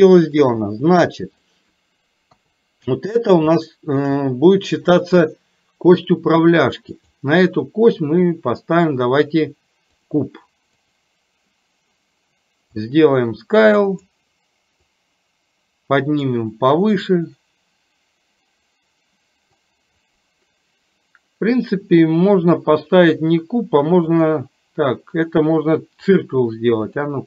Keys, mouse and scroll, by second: 0.0 shift+middle click, 1.3 click, 2.4 KP_3, 3.5 shift+middle click, 7.0-10.1 drag, 10.9 click, 12.8-14.0 drag, 14.9-17.0 drag, 17.0-19.6 middle drag, 22.5-24.4 drag, 25.3-26.3 drag, 27.0 click.